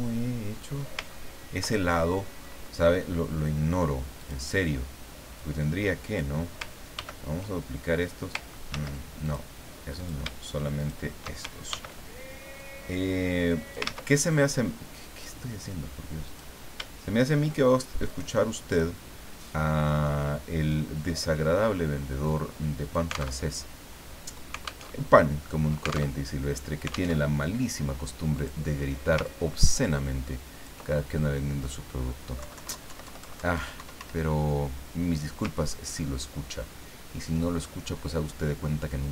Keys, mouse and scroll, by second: 0.1-0.6 scroll down 4, 0.8-1.1 scroll up 3, 1.1 ctrl+scroll down 2, 1.8 ctrl+middle click, 4.2 click, 5.5 click, 6.9 ctrl+d, 8.7 ctrl+z, 9.2 ctrl+click, 10.0 shift+click, 10.8 shift+click, 11.7 ctrl+shift+d, 12.6-14.4 drag, 13.8 ctrl+z, 16.3 click, 18.1 shift+click, 20.7-23.4 drag, 23.4 alt+Tab, 24.9 alt+Tab, 26.2 alt+Tab, 27.1 alt+Tab, 28.4 click, 29.2-30.9 ctrl+drag, 32.4 Left, 33.8 Up, 36.1 ctrl+scroll up 2, 37.8-38.1 ctrl+scroll down 3, 38.6-39.0 scroll up 2.